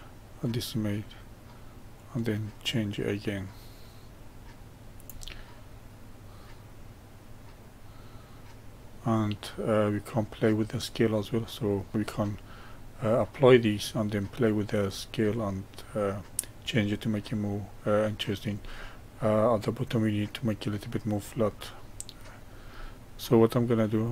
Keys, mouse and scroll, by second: 5.5-8.5 middle drag, 12.6-17.6 middle drag, 18.7-24.1 middle drag.